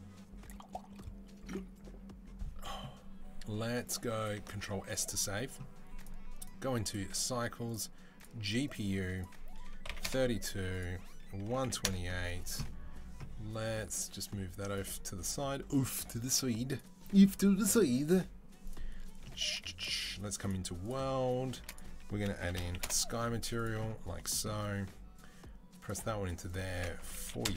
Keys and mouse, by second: 4.5 ctrl+s, 5.9-6.2 middle drag, 6.2-8.5 drag, 8.5 middle click, 9.0-27.5 drag.